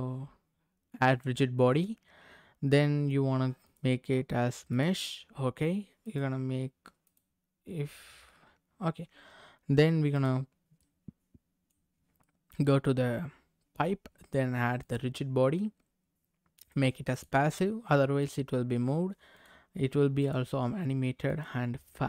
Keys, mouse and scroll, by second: 1.1 click, 3.6-4.9 drag, 6.0-7.1 drag, 10.1 click, 10.7 middle click, 11.9 scroll up 2, 12.2 middle click, 14.8 click, 16.6 click, 18.2 click, 19.3 click, 20.2-21.4 drag.